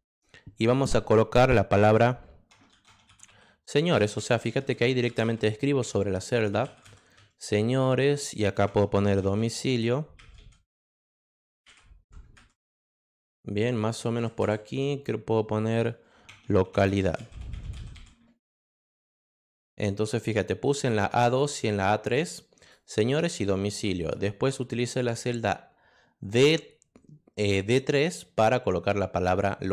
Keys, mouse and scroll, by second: 2.5-7.1 typing, 8.8-12.0 typing, 16.3-18.4 typing, 19.0 click, 20.7 click, 21.2 click, 22.6 click, 23.0 click, 24.0 click.